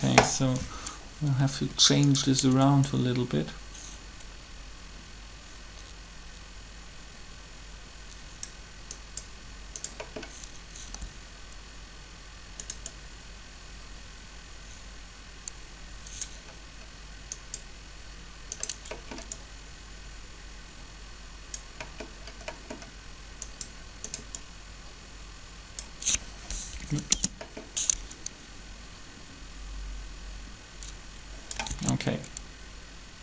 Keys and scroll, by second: 10.8 g, 26.5 Delete, 26.9 Return, 31.7 alt+a.